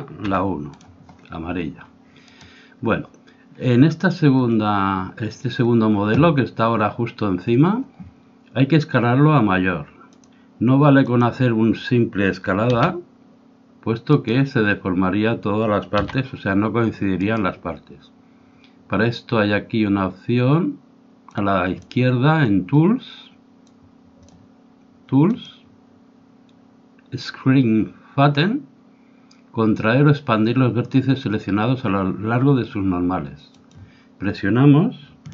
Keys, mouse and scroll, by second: 2.3-4.0 right drag, 10.2-12.8 drag, 12.8 s, 16.0 s, 21.3-23.2 drag, 24.2-27.3 drag, 33.4-35.3 drag.